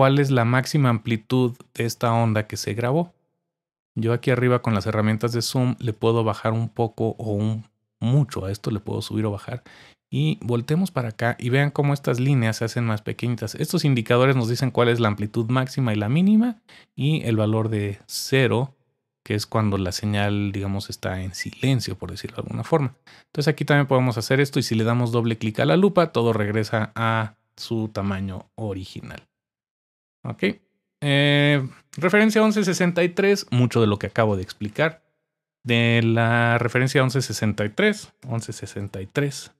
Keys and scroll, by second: 37.9-39.3 typing.